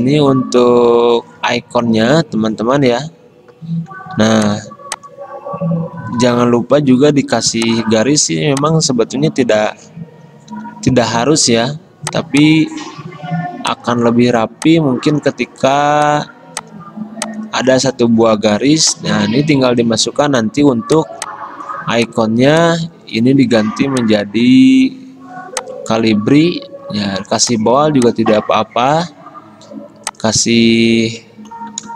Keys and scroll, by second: 4.3 v, 7.0 p, 9.8 v, 10.6 d.